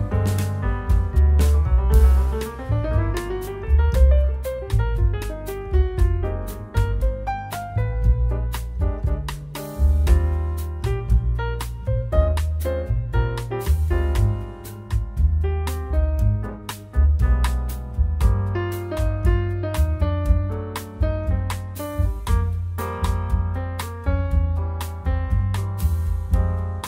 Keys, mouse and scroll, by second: 0.1 shift+d, 1.5 ctrl+shift+d, 2.6 middle click, 3.3 click, 4.8 click, 5.2 click, 5.4 shift+a, 7.4 click, 8.3 click, 8.6 click, 9.5-10.3 scroll up 10, 9.8 shift+middle click, 10.3 click, 12.4 scroll down 3, 12.5 middle click, 13.2 click, 13.7 click, 14.2 scroll up 4, 14.4 scroll down 2, 14.7 scroll up 1, 15.2 middle click, 15.5-16.7 scroll down 9, 15.8 middle click, 16.7-17.6 scroll up 9, 18.4 click, 19.2 click, 19.5 click, 20.1-20.6 scroll down 6, 20.7 shift+middle click, 21.0 scroll up 3, 21.7 click, 23.6 click, 24.3 click, 24.8 click, 26.1 scroll up 4, 26.2 scroll down 5, 26.4 middle click.